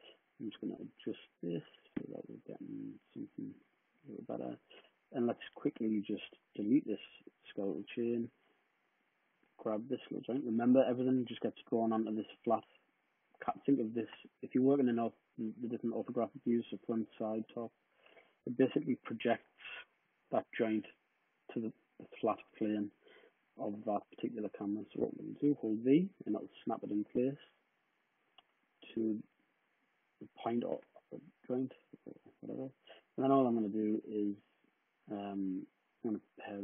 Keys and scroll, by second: 3.4 space, 3.8 space, 6.6 w, 7.8 BackSpace, 13.8 space, 23.2 space, 24.8-25.5 typing, 28.8-30.0 typing, 33.0 typing.